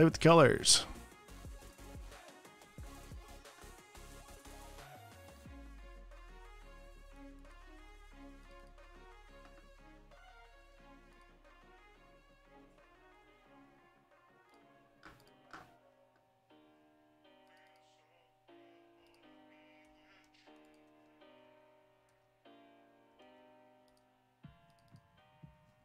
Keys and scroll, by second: 4.7 super+space, 6.3 t, 13.4 alt+BackSpace, 20.2 Escape, 20.6 space, 22.4 super+z, 23.6 super+z.